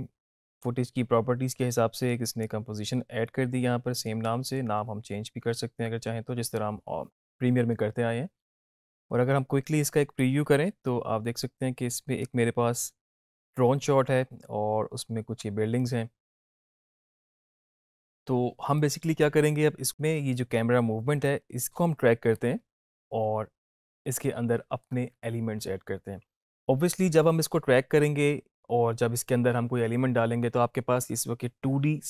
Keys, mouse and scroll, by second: 10.2-24.9 drag.